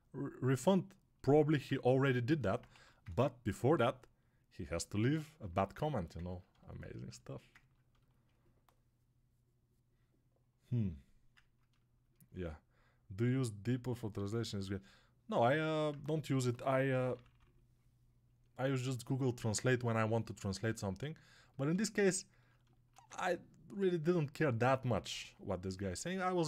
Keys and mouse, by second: 20.9-22.5 right drag, 22.5-26.4 alt+shift+drag.